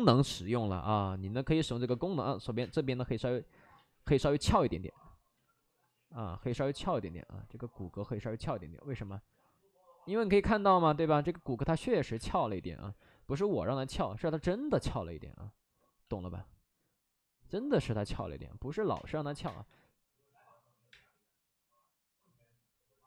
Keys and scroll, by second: 0.2 space, 1.8 space, 2.5 space, 3.6 ctrl+z, 4.0 1, 5.3 ctrl+z, 6.2 ctrl+z, 6.4 2, 12.1 space, 12.3 space, 12.5 3, 18.1-19.6 typing, 20.8 space.